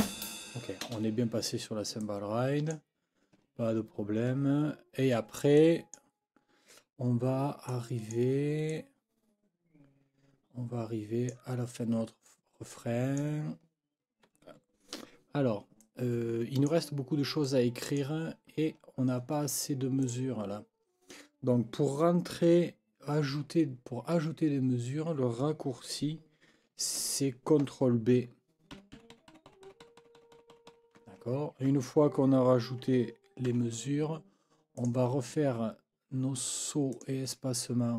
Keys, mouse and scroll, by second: 0.8 space, 2.0 click, 5.6 click, 7.7 click, 8.7-11.5 drag, 12.2-13.4 drag, 15.8-16.8 drag, 17.4 click, 18.8 ctrl+scroll down 2, 20.0 click, 28.7 ctrl+b, 33.4 F9, 34.8 click, 36.9 click.